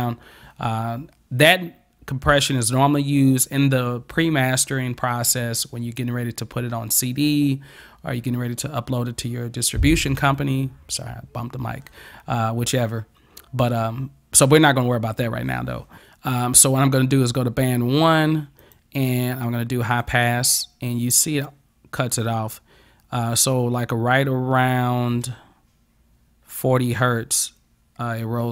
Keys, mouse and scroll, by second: 18.7 click, 20.0 click.